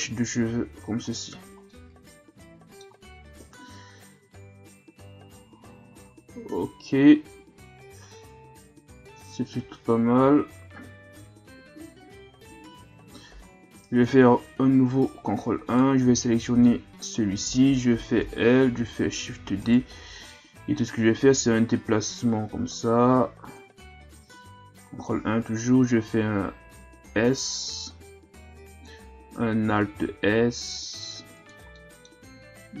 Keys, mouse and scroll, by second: 0.3 Tab, 0.7 a, 1.1-1.7 scroll down 4, 1.7-3.4 middle drag, 3.4 KP_1, 4.6-6.2 scroll down 1, 6.2-6.8 scroll down 1, 6.8-10.1 scroll up 5, 12.8 KP_3, 14.0 ctrl+KP_1, 14.9-15.7 scroll up 1, 15.7 right click, 16.5 Tab, 17.0 right click, 18.2 l, 19.2 shift+d, 20.0 scroll down 1, 20.3-21.8 middle drag, 21.8-24.8 drag, 24.9 ctrl+KP_1, 27.1 s, 30.0 alt+s, 31.7-32.8 middle drag.